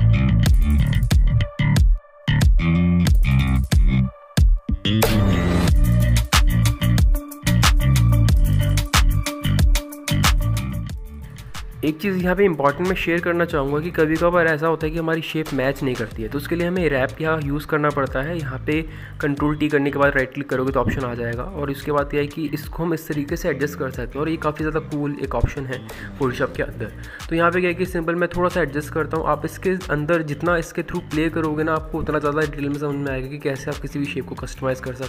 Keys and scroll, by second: 4.5 ctrl+t, 6.0 ctrl+t, 8.1 ctrl+KP_0, 11.8 ctrl+t, 17.4 ctrl+t.